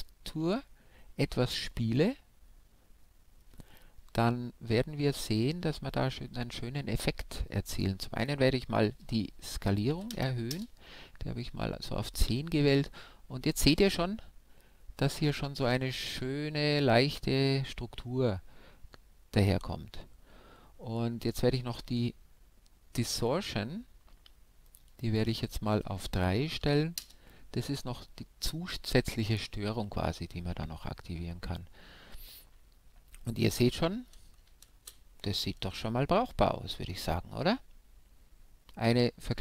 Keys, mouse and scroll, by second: 0.9-3.1 middle drag, 3.2 middle click, 4.4-8.1 middle drag, 8.2-10.7 drag, 24.7-26.6 drag, 34.7 shift+space.